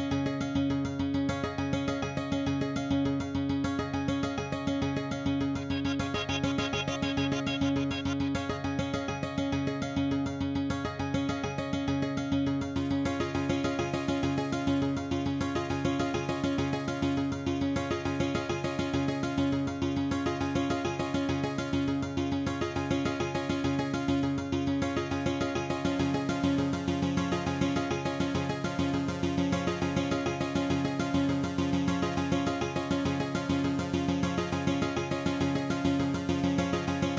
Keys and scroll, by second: 8.0 shift+g, 8.2 shift+i, 8.8 Tab, 12.8 F9, 26.1 F9.